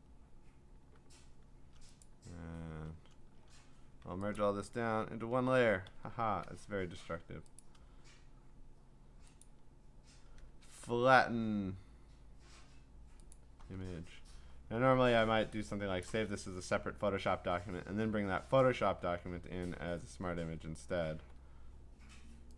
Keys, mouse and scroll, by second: 0.1-1.4 scroll down 2, 2.0 click, 3.2-3.9 scroll up 6, 4.4 shift+click, 4.4 scroll, 4.7 ctrl+e, 5.9 ctrl+s, 7.6 click, 9.4 click, 13.3 click, 14.5-15.4 scroll, 16.0 click, 19.4 ctrl+Tab, 21.2 ctrl+w.